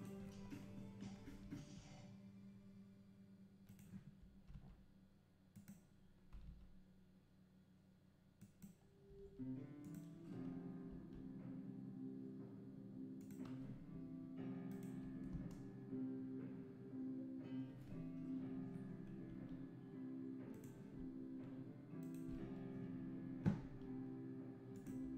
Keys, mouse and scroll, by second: 0.0-1.3 shift+right drag, 1.3 r, 4.2 r, 9.1 r, 10.9 g, 14.7 shift+Right, 14.7-15.3 right drag, 15.3 space, 18.6 Escape, 19.3 g, 22.0-23.6 shift+right drag, 23.6 g, 25.0 r.